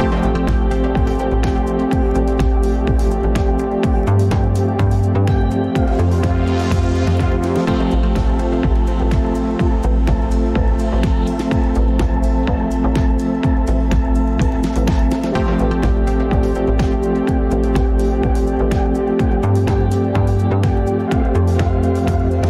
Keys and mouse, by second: 0.0 Tab, 3.2 click, 6.5 click, 7.5 click, 8.1-11.4 drag, 11.9-12.4 middle drag, 20.4 middle click.